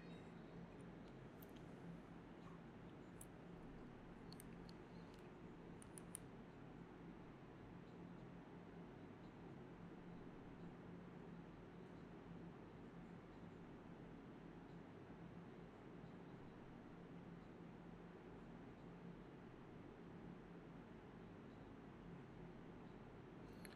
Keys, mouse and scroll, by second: 0.0-0.2 typing, 1.2 alt+click, 2.6 typing, 7.0 double click, 7.8 typing, 9.5 shift+click, 9.6 shift+double click, 9.6 shift+click, 10.0 ctrl+z, 10.6 alt+click, 11.6 alt+click, 13.6 ctrl+shift+click, 14.1 ctrl+shift+x, 14.2 ctrl+shift+x, 14.6 alt+click, 14.7 alt+click, 15.4 ctrl+b, 15.9 typing, 16.4 double click, 16.9 ctrl+shift+click, 18.1 ctrl+z, 19.8-21.3 typing, 22.2 alt+click, 22.4 alt+click, 23.6 d.